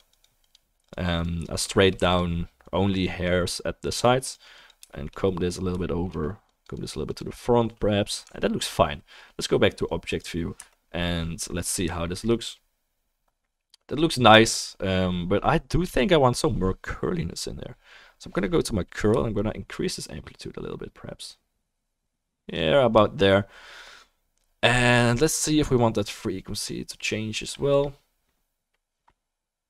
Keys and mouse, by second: 1.7-8.4 shift+middle drag, 2.1 f, 2.6-29.6 drag, 5.8-29.6 shift+right drag, 10.6 KP_0, 12.1-29.6 shift+middle drag.